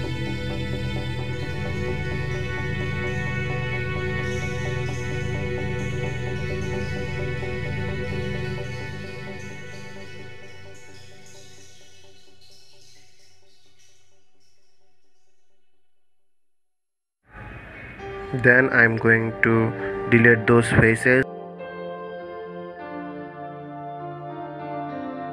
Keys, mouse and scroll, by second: 1.0-1.3 scroll down 2, 1.9-3.6 middle drag, 3.6 KP_1, 4.7-5.5 scroll up 1, 5.5-8.6 middle drag, 9.3 KP_1, 10.5-11.9 middle drag, 11.9 KP_1, 14.8 ctrl+KP_3, 16.6-16.9 scroll up 2, 18.2 3, 18.8 click, 20.1 shift+click, 20.7 shift+click, 23.5 Delete.